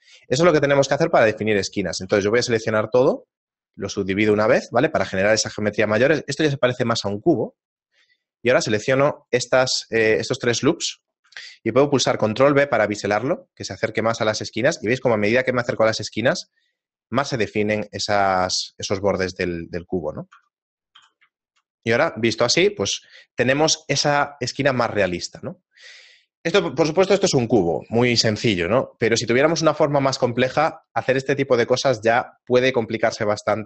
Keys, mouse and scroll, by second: 0.7 ctrl+z, 1.7 shift+middle click, 2.0 a, 2.1 a, 2.9 w, 5.5 shift+middle click, 7.7 alt+right click, 8.5 alt+shift+right click, 9.8 shift+middle click, 10.7 middle click, 12.5 ctrl+b, 19.3 scroll up 1, 20.1-20.5 scroll up 2, 20.5 Tab, 21.5 shift+middle click, 21.7 middle click, 22.1-22.4 scroll down 1, 22.9 scroll down 2.